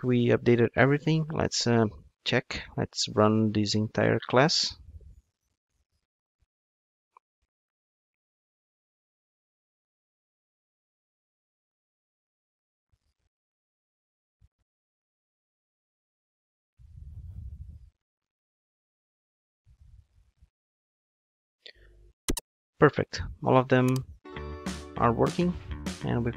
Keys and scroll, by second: 4.6 ctrl+shift+d.